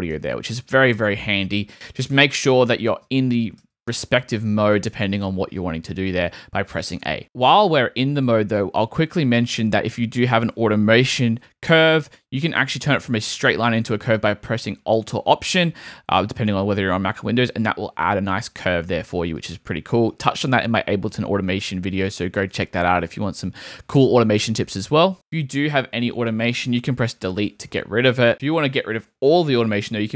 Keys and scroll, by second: 3.0 a, 27.3 BackSpace, 27.9 super+BackSpace, 28.1 super+z.